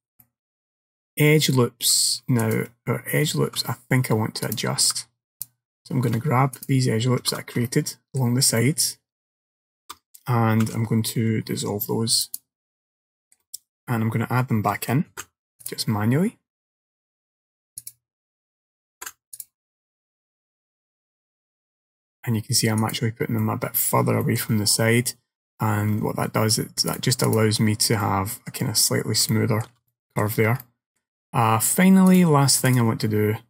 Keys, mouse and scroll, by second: 0.3 middle click, 1.3-2.0 scroll up 2, 2.0 scroll up 1, 2.5 alt+click, 4.5 click, 5.4 alt+click, 6.6 alt+shift+click, 7.7 shift+middle click, 8.7 shift+middle click, 10.7 x, 13.0 shift+middle click, 15.2 ctrl+r, 19.1 ctrl+r, 23.5 middle click, 24.3 shift+middle click, 27.0 click, 28.1 middle click, 29.4 shift+middle click, 30.0 middle click, 30.7 middle click, 32.2 click.